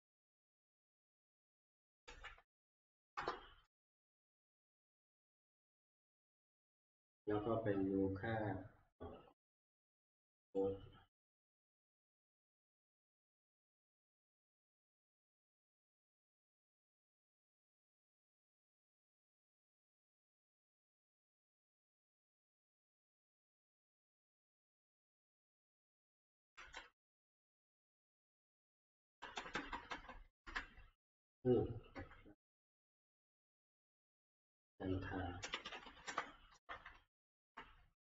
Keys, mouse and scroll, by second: 0.1 F2, 0.8 Escape, 1.9 Up, 2.0 ctrl+c, 2.4 ctrl+Down, 3.2 Return, 6.2 F9, 8.4 F9, 10.6 click, 14.0 click, 15.4 click, 16.6 click, 20.9 click, 23.7 click, 24.9-25.6 ctrl+scroll down 6, 25.6-25.9 ctrl+Down, 26.6 ctrl+End, 27.3 ctrl+Left, 27.9-28.9 Right, 29.2 Right, 29.4 Right, 29.7 Right, 29.9 Right, 30.0 Right, 30.6 ctrl+Up, 31.9 Left, 33.6 Up, 35.2-36.9 typing, 36.7 Tab.